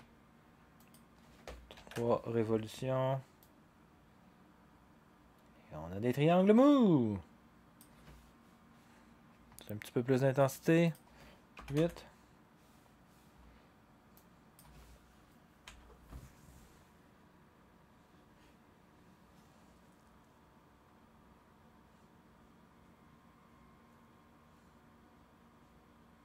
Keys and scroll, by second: 1.7 3, 1.9 Return, 11.5 8, 11.7 Return, 15.6 0.